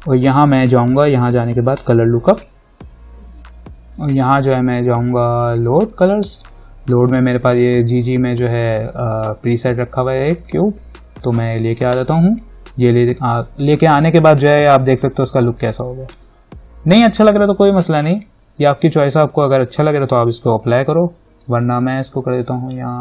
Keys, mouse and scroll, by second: 0.7 click, 4.1 click, 12.1 click, 16.2 click.